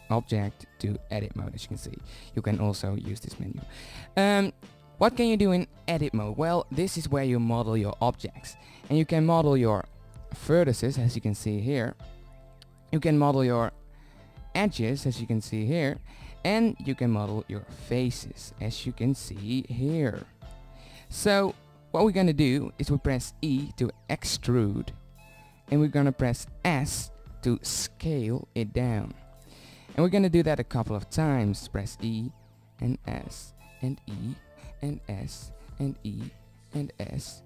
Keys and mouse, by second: 0.1 Tab, 0.7 Tab, 1.2 Tab, 1.9 Tab, 2.6 Tab, 7.5-9.0 middle drag, 10.3 click, 11.1-12.2 middle drag, 12.2 click, 13.6 ctrl+z, 14.8-15.8 drag, 17.7 right click, 18.3 ctrl+z, 18.7 click, 21.8 click, 23.2-25.1 drag, 25.1 e, 28.1 s, 30.8-32.1 drag, 32.1 e, 33.3 s, 34.6 e, 35.4 s, 36.4 e, 37.3 s.